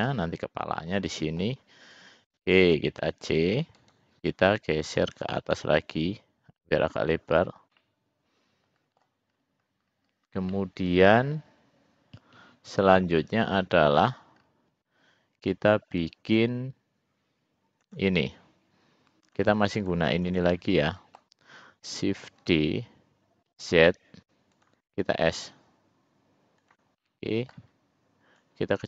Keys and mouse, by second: 2.0 click, 3.0 c, 5.0 click, 5.9-7.1 drag, 7.8-9.2 middle drag, 10.7-14.1 middle drag, 18.1 click, 19.5 shift+click, 20.0 shift+click, 20.5 shift+click, 21.0 middle click, 22.6 shift+d, 25.6 s, 27.2 middle click, 28.6 click.